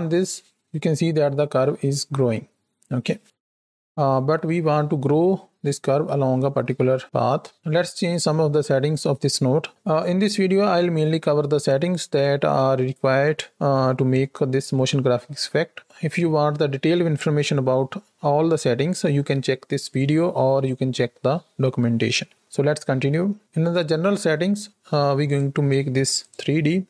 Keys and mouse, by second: 3.8 space, 4.0 shift+Left, 22.6-23.0 middle drag, 25.1-26.1 drag, 26.7 middle click.